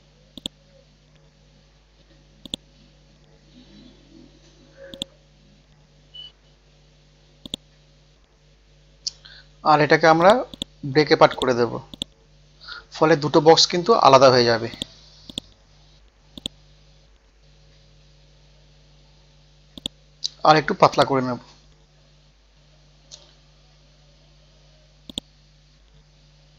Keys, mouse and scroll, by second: 0.4 click, 1.0 click, 1.7 ctrl+z, 2.4 click, 3.4 KP_6, 4.9 click, 5.8 scroll down 1, 7.5 right click, 10.2 click, 11.9 right click, 14.7 click, 17.4 F12, 18.0 Tab, 18.1 KP_2, 18.2 Tab, 19.2 scroll down 1, 19.7 click, 20.2-20.9 scroll up 1, 20.9 click, 21.4-21.9 scroll down 1, 22.6-23.3 scroll up 1, 25.1-26.2 drag.